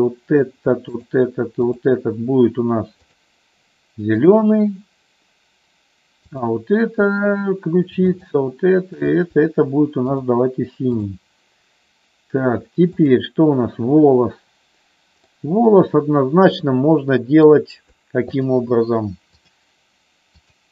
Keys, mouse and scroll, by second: 3.1 click, 4.2 click, 6.2-7.6 drag, 9.0 shift+click, 10.2 click, 11.1 click, 13.0-14.8 drag, 15.3-17.7 middle drag, 18.3-19.8 shift+drag.